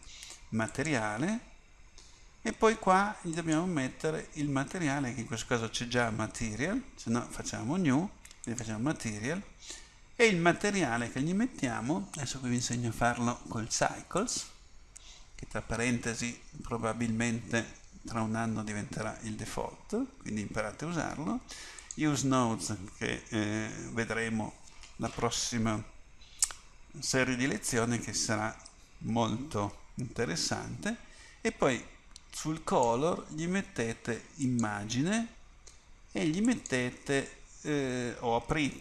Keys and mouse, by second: 0.8-38.8 drag.